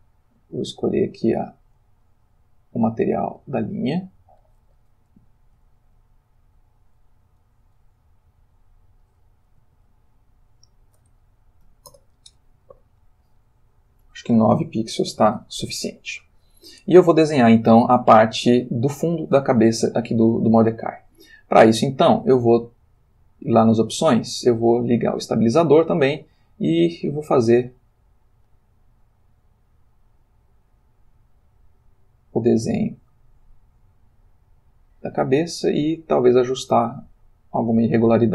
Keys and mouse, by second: 1.4 click, 2.5 click, 3.4 click, 4.4 click, 5.8 ctrl+z, 7.7 f, 8.6 click, 9.0 click, 9.8 ctrl+z, 10.7 click, 11.6 9, 11.9 Return, 13.2 click, 15.2 ctrl+z, 19.9 ctrl+middle click, 23.0 click, 25.1 click, 27.2-38.3 drag.